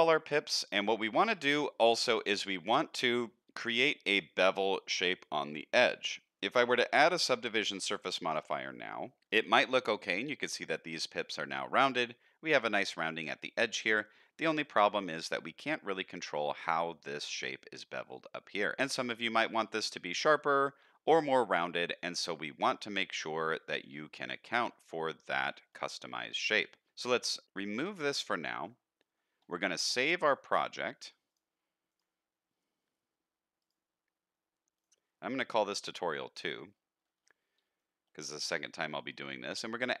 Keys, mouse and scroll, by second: 1.4-2.0 middle drag, 2.3 shift+middle drag, 2.7-3.0 middle drag, 5.4-6.0 middle drag, 7.1-9.2 drag, 9.2 middle click, 10.2 middle drag, 11.3-11.9 middle drag, 13.1-13.7 middle drag, 14.6 click, 15.0-15.4 middle drag, 17.9-18.8 middle drag, 19.5 middle drag, 22.0-22.5 middle drag, 22.8-23.9 middle drag, 24.3-24.6 middle drag, 25.2-25.6 shift+middle drag, 25.7 middle drag, 27.8 click, 28.6 middle click, 31.3-32.0 drag, 37.3-37.6 shift+middle drag, 37.8-38.1 middle drag, 38.3 shift+middle click, 39.7-40.0 drag.